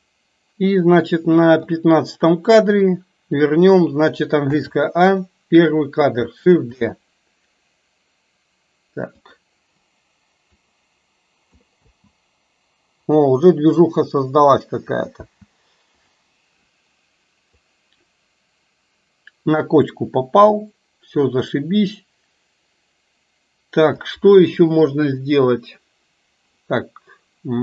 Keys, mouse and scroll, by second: 2.8-3.5 drag, 4.6 a, 5.2-5.8 drag, 6.8 shift+d, 10.7-11.7 drag, 11.8 space, 15.5 space, 16.1 click, 17.6-24.2 drag.